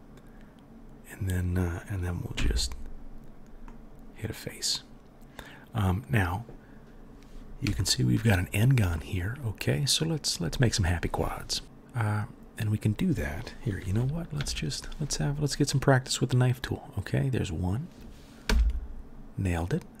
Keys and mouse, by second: 2.3 f, 11.6-19.7 middle drag, 14.4 k, 19.7-20.0 drag.